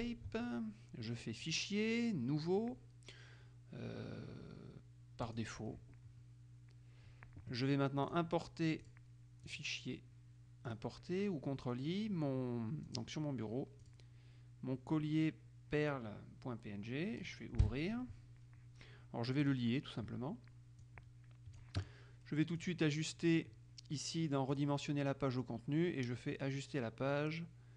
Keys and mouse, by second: 1.6 click, 5.4 click, 8.3 click, 9.0 click, 9.7 click, 10.9 click, 13.1 click, 14.0 click, 17.8 Return, 19.6 click, 21.0-22.2 drag, 22.9 click, 24.7 click.